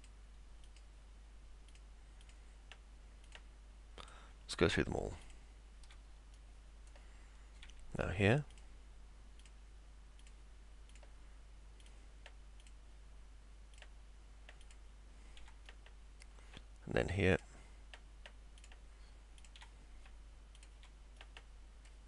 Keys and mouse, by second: 0.0 ctrl+click, 0.7 ctrl+click, 1.7 ctrl+click, 2.3 ctrl+click, 3.3 ctrl+click, 4.0 ctrl+click, 5.3 ctrl+click, 6.4 middle click, 8.5 ctrl+click, 9.4 ctrl+click, 10.2 ctrl+click, 11.8 ctrl+click, 12.6 ctrl+click, 13.8 ctrl+click, 14.6 ctrl+click, 15.7 middle click, 17.4 ctrl+click, 18.6 ctrl+click, 19.4 ctrl+click, 20.6 ctrl+click, 21.2 middle click.